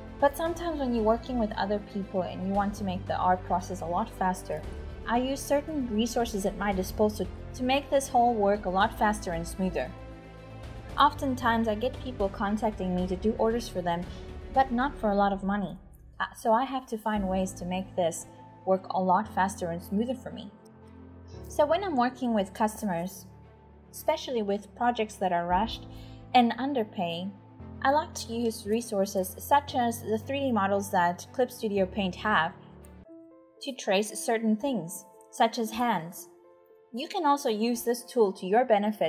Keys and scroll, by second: 0.0-5.6 typing, 6.7-11.8 typing, 16.2 typing, 17.9-19.1 typing, 20.2-28.6 typing, 30.7-31.8 typing, 37.3-39.0 typing.